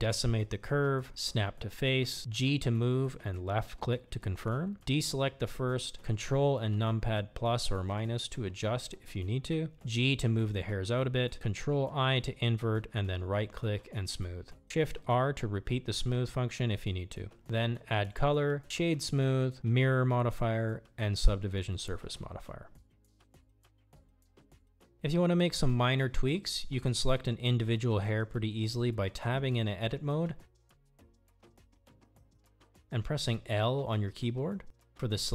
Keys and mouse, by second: 0.8 click, 1.0 middle click, 1.6 g, 3.4 ctrl+i, 4.1-4.8 right drag, 5.4 shift+r, 5.6 shift+r, 6.5 Tab, 7.9 click, 8.9 click, 9.2-11.0 ctrl+shift+drag, 13.5 drag, 14.8-15.7 middle drag, 16.9-17.3 drag, 19.0-19.4 drag, 19.9-20.9 drag, 22.0 middle drag, 22.6-23.1 middle drag, 23.7 shift+middle click, 23.9 shift+middle click, 24.2-25.1 middle drag, 32.4 Tab, 33.4 middle click, 34.7 shift+middle click.